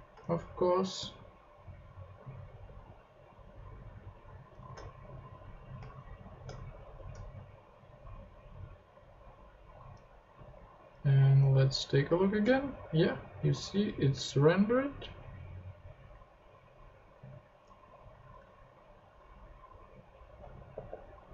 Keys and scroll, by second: 0.2 shift+Tab, 1.2 Tab, 6.8 shift+super+p, 10.9 super+Tab, 18.1 ctrl+Tab, 20.7 h.